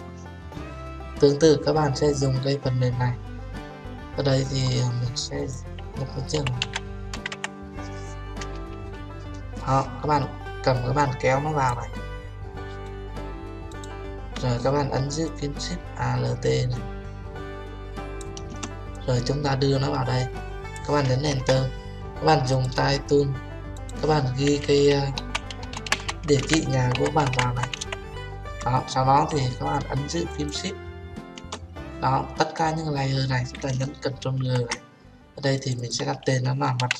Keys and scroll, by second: 21.3 Return, 34.4 ctrl+g.